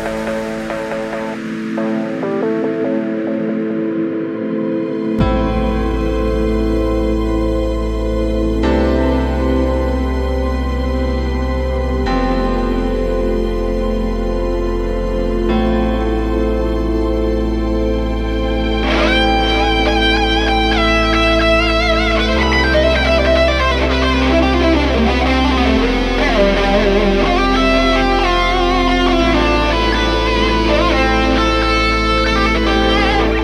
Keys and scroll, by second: 24.9 ctrl+alt+z, 27.5 ctrl+z.